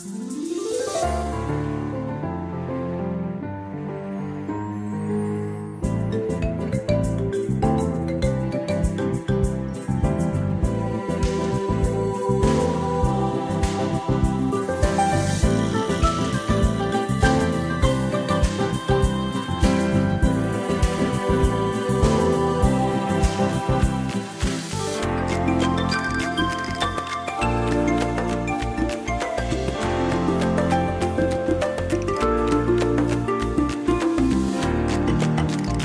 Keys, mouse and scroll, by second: 0.7 ctrl+click, 4.5 ctrl+scroll up 1, 7.2 click, 16.1 click, 19.9 click, 21.5 click, 22.3 click, 23.6 ctrl+scroll up 1, 25.0 click, 26.5 click, 28.6 scroll down 1, 29.6 scroll down 1, 30.5 space, 31.2 click, 32.8 shift+click, 33.9 click, 35.7 click.